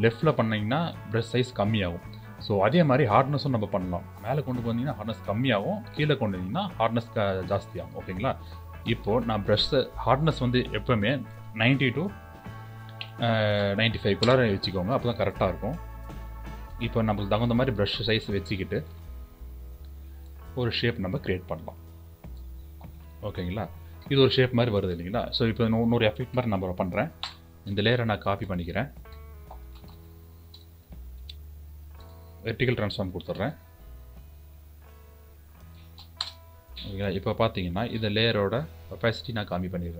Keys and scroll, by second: 27.6 ctrl+j, 30.4 ctrl+t.